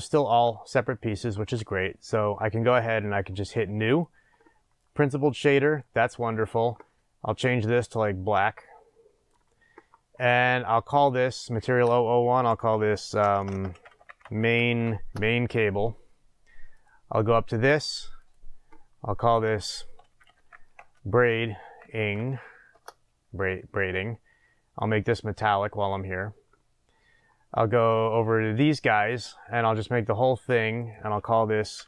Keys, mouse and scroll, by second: 0.7-3.7 scroll up 2, 3.7-4.0 scroll up 1, 4.0 click, 15.1 Return, 15.1-16.8 drag, 18.3 click, 22.7-28.1 drag, 22.8 Return, 30.1-31.8 drag.